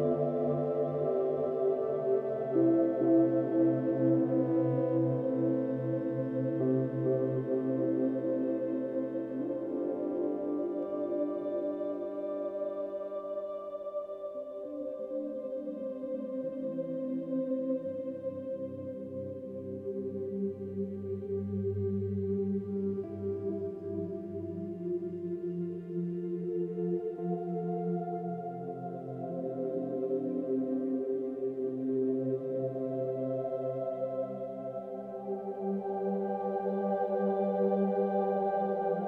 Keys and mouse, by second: 4.3 click, 4.5 click, 5.7 click, 6.0 drag, 7.4 click, 8.7 ctrl+d, 9.6 click, 10.7 shift+Right, 10.9 shift+Right, 11.6-15.3 shift+Right, 15.3 Left, 15.5 Left, 15.7 Left, 15.8 Left, 19.7 click, 20.4-23.1 drag, 24.9-26.5 drag, 27.2 click, 28.0 drag, 29.0 click, 29.5-32.2 drag, 32.5 ctrl+z, 34.7 click, 36.2 click.